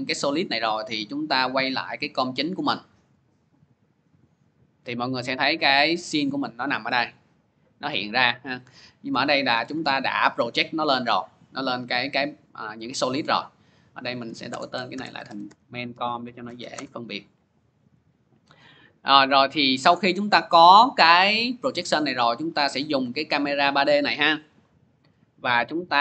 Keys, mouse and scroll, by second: 0.5 click, 1.6 click, 4.1-6.7 drag, 8.4-13.5 drag, 13.8 click, 14.3 Return, 14.5-16.8 typing, 19.1 click, 20.4 click, 21.4 middle click, 22.6 middle click, 22.6 middle click, 24.3 p, 25.3 p.